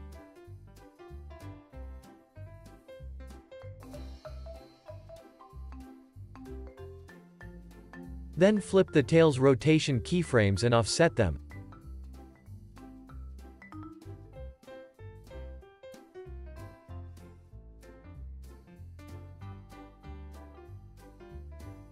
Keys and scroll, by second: 16.3 z, 19.9 alt+w, 20.3 super+s, 21.0 space.